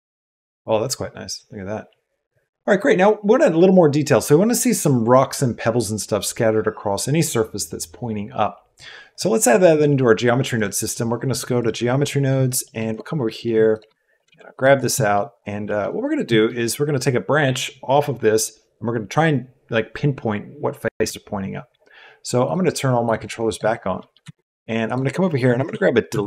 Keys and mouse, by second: 9.0 click, 10.6-11.6 drag, 12.0 middle click, 12.7 click, 12.7 middle click, 12.7 right click, 13.3 click, 13.6 click, 14.0 shift+click, 14.2 g, 14.7 click, 14.9 click, 15.7 click, 16.3 click, 23.0-24.1 drag, 24.2 shift+a.